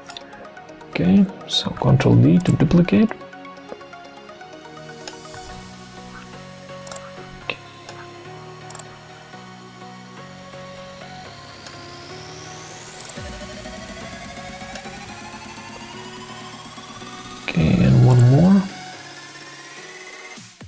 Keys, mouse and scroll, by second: 1.7 ctrl+d, 5.4 ctrl+d, 15.1 ctrl+d, 17.0 ctrl+d.